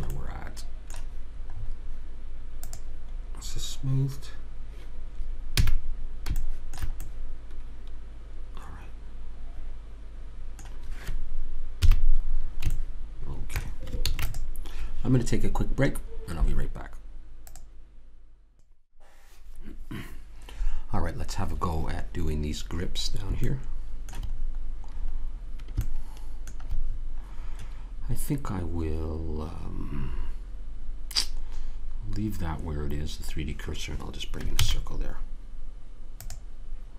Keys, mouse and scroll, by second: 2.7 click, 5.7 a, 7.2-8.7 middle drag, 11.9 KP_3, 14.1 ctrl+s, 23.8 middle click, 24.2 middle click, 34.9 shift+a.